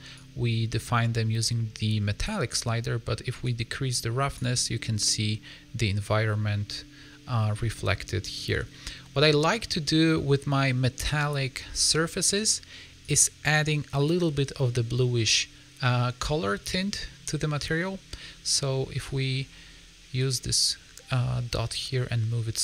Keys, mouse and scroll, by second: 0.1 click, 3.4 click, 6.0 middle click, 8.6 middle click, 9.4 scroll down 2, 9.9 middle click, 12.9 click.